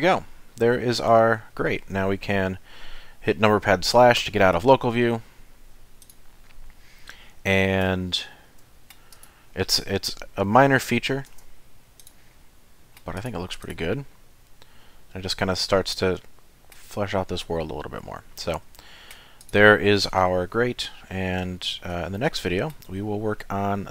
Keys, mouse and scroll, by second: 1.1 scroll down 3, 4.2 KP_Divide, 5.1-6.0 scroll down 3, 6.0 click, 7.0 middle click, 8.2 shift+middle click, 8.6 middle click, 9.1 click, 11.4 shift+c, 12.0 click, 12.3 middle click, 13.2 click, 13.6 click, 14.1 middle click, 17.0-17.5 scroll up 6, 17.5 middle click, 18.3-18.6 scroll up 3, 18.7 shift+middle click, 19.4 click, 20.2 KP_Decimal, 21.0 middle click, 22.1 shift+middle click.